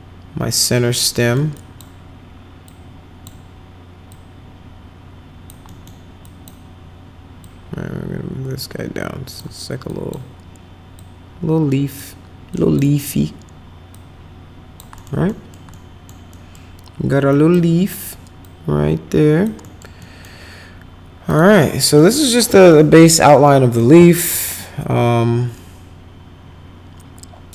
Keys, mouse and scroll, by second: 1.2 middle click, 1.5 click, 2.6 click, 4.1-5.4 drag, 5.6 middle click, 6.2 click, 7.4-9.3 drag, 9.8 click, 10.9-12.0 drag, 12.5 click, 13.9 click, 14.9 middle click, 15.2 middle click, 15.7 middle click, 16.3 middle click, 17.3 click, 18.4 click, 19.6 middle click, 20.0 middle click, 21.2 click, 21.7 middle click, 22.7 middle click, 23.4 middle click.